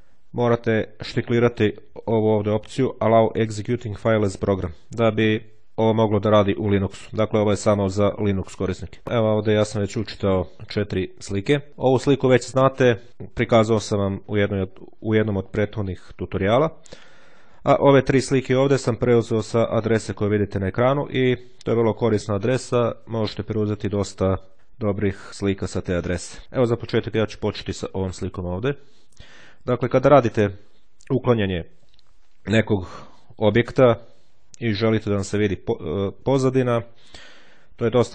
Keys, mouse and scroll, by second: 0.3 click, 1.3 click, 8.6 click, 16.8 click, 18.3 click, 19.7 click, 29.1-30.1 ctrl+scroll up 2, 30.4 ctrl+scroll down 2.